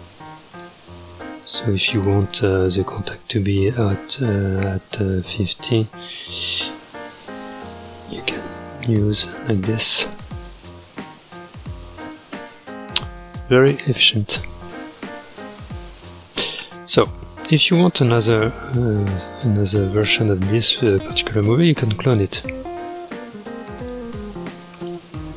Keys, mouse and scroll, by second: 0.3 click, 1.1 g, 3.1-5.5 drag, 5.5 g, 8.2 space, 10.5-12.4 drag, 12.4 space, 14.1 click, 14.7 space, 16.7 space, 17.2-17.6 scroll down 4, 17.6-17.9 scroll up 2, 22.3-24.7 drag, 24.7 space.